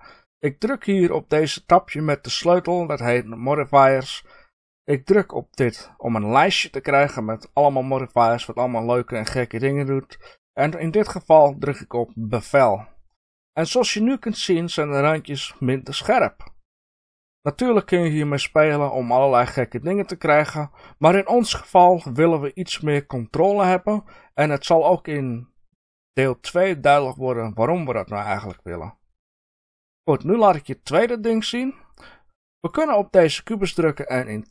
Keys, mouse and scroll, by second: 3.5 click, 5.6-29.4 drag, 13.5 scroll up 1, 19.3-22.8 scroll down 1, 32.6 click.